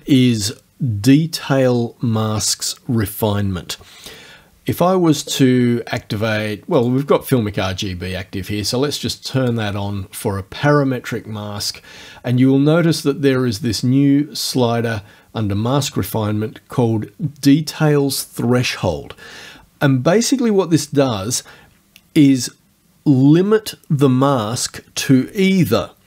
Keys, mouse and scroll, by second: 6.8 click, 9.4 click, 10.8-11.6 scroll down 1.